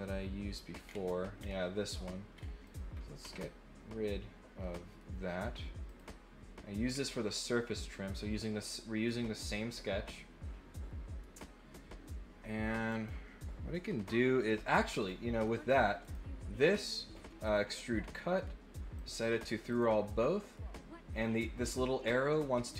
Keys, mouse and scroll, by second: 0.8-1.4 scroll down 2, 2.3 scroll up 1, 4.6 middle click, 5.9 click, 6.8 scroll down 1, 12.8 click, 14.9 click, 15.3 middle click, 16.0 click, 17.4 click, 18.9 click, 19.6 click, 20.2 middle click.